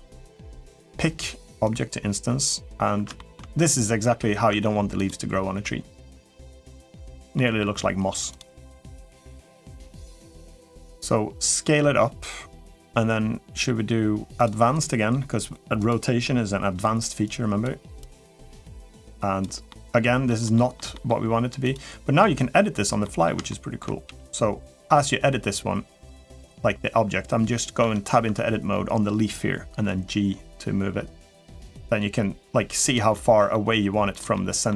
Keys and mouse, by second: 0.7 click, 2.9 shift+middle drag, 3.9 Tab, 4.3 Tab, 4.7 click, 5.9-6.7 middle drag, 7.1 middle drag, 9.7-12.5 drag, 14.1 click, 15.6 click, 17.0 click, 17.8-19.2 drag, 19.5 middle click, 20.3 shift+middle click, 20.7 middle click, 21.5 click, 22.0 Tab, 22.8 middle click, 23.3 shift+middle click, 23.8 g, 24.9 middle click, 26.0 middle click, 27.6 Tab, 28.0 Tab, 29.6 g, 32.9 middle click, 33.4 g, 34.1 middle click.